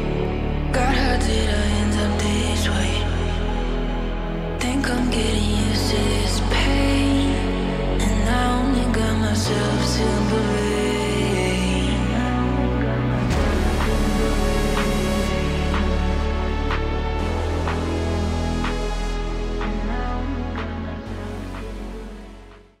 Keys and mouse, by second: 10.4-22.8 middle drag.